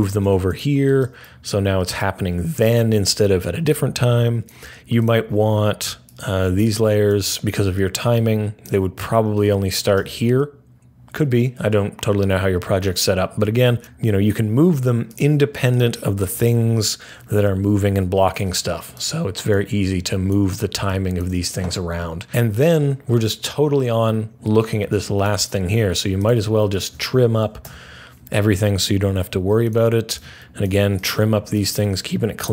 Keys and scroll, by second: 27.5 alt+], 32.4 alt+[.